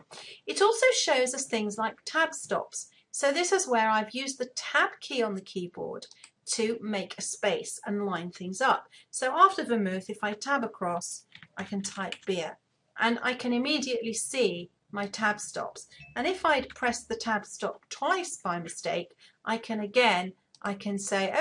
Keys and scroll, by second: 9.8 Tab, 16.2 Tab.